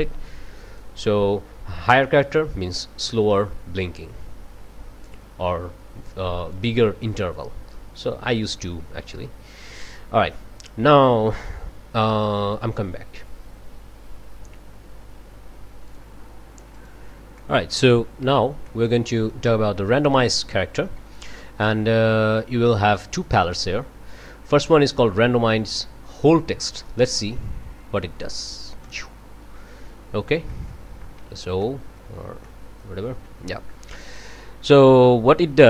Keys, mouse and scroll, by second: 3.8-5.3 drag, 6.5-8.2 drag, 7.7 right click, 9.7 scroll down 2, 12.5 click, 15.9 click, 16.8 click, 17.4-17.8 scroll up 1, 18.3 ctrl+s, 18.7-19.0 ctrl+scroll up 1, 19.0 click, 28.8 click, 30.0 scroll down 1, 30.5 click, 31.2 o, 31.6-32.1 scroll up 1, 32.1 click, 32.4-33.0 scroll up 1, 33.0 o, 35.0-35.6 drag.